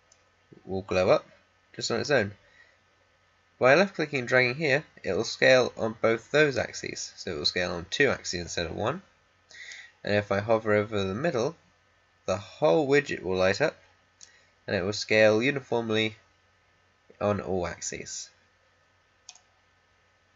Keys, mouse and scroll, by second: 1.9-11.9 drag, 14.1-20.3 drag.